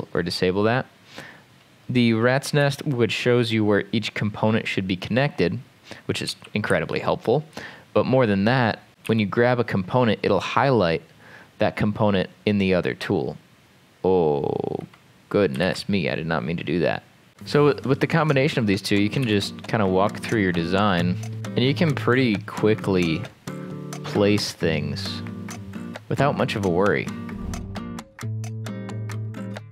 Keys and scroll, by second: 2.6 m, 6.3 r, 6.7 r, 9.1 m, 15.7 ctrl+z, 19.3 m, 20.3 Escape, 21.1-21.8 typing, 27.6-29.7 typing.